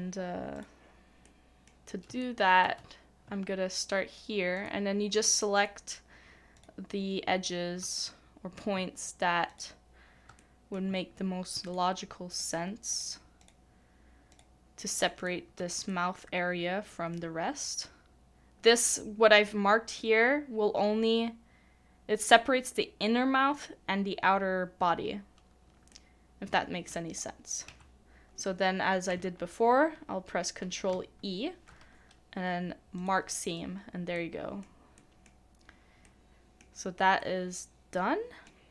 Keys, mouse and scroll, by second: 1.2 middle click, 2.2 shift+middle click, 4.6 shift+click, 5.6 shift+click, 6.6 shift+click, 7.4 shift+click, 8.2 middle click, 9.5 shift+click, 10.4 middle click, 10.4 shift+click, 11.7 shift+click, 14.3 shift+click, 15.2 shift+click, 15.9 middle click, 25.9 middle click, 30.9 ctrl+e, 34.1 middle click, 35.3 scroll down 1, 35.5 scroll up 1, 35.6-36.0 scroll down 1, 36.0 middle click.